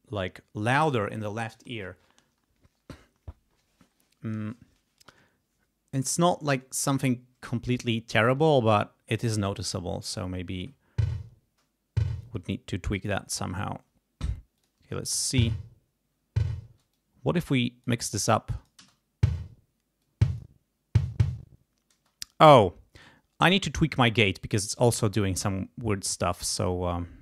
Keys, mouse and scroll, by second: 10.5 space, 12.2 space, 14.5 click, 14.9 space, 16.6 space, 16.9-18.0 drag, 18.3 click, 18.7 space, 20.0 click, 21.9 space, 26.3 right click.